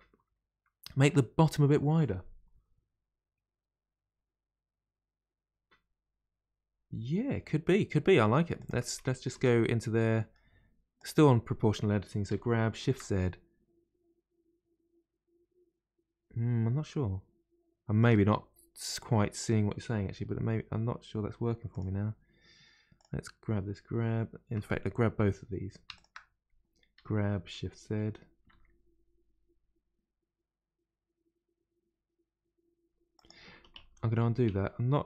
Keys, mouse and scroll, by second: 7.7-8.1 scroll down 1, 8.1 middle click, 8.5 click, 9.3 Tab, 9.9-10.9 middle drag, 10.9 click, 12.3 g, 12.3 g, 19.3 click, 20.1 g, 22.9 click, 25.9 shift+click, 26.9 g, 33.5 ctrl+z, 33.7 ctrl+z.